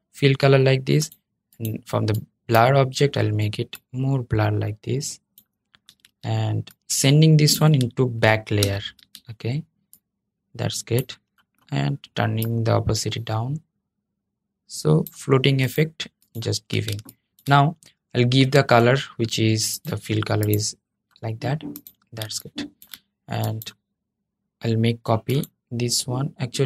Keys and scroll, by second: 8.3 super+{.